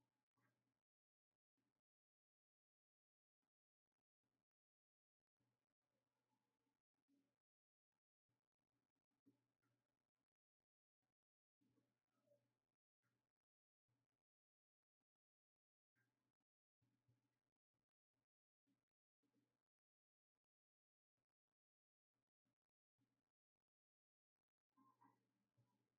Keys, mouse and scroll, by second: 10.5-25.9 drag.